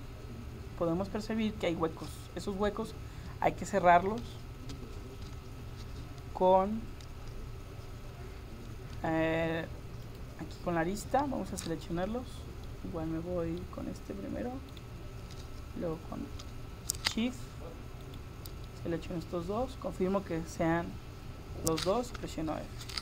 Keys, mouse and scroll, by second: 10.1-11.2 drag, 11.2 right click, 11.7-14.8 middle drag, 14.8-20.6 right drag, 18.7-20.6 middle drag, 22.2 f.